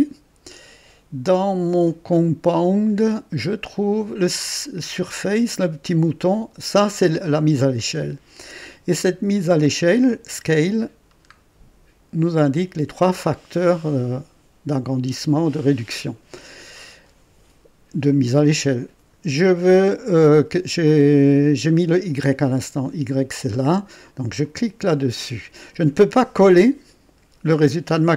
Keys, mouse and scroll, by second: 2.7 click, 6.2 click, 9.7 click, 10.6-11.2 scroll down 2, 24.4 click.